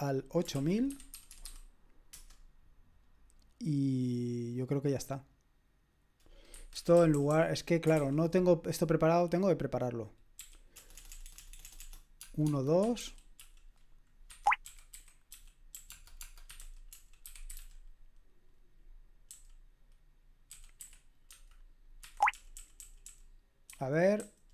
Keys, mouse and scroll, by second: 0.0-1.9 typing, 2.1 Return, 6.5 Escape, 6.9-7.9 typing, 10.4-16.5 typing, 14.3 Escape, 16.9 Escape, 17.5 typing, 19.3-24.5 typing, 22.0 Escape.